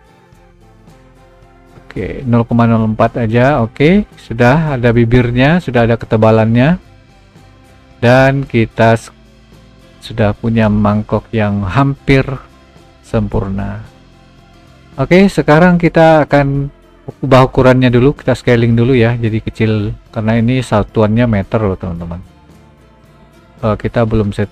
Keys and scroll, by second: 8.8 g, 16.9 s, 20.4 s, 23.6 d.